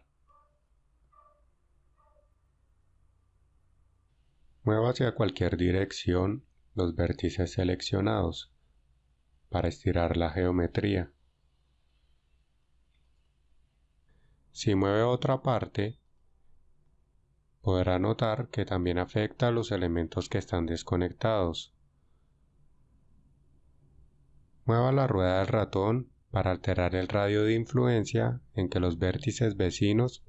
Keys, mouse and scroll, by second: 8.4 g, 13.1 right click, 16.3 alt+right click, 17.5 g, 27.4-30.2 scroll up 4.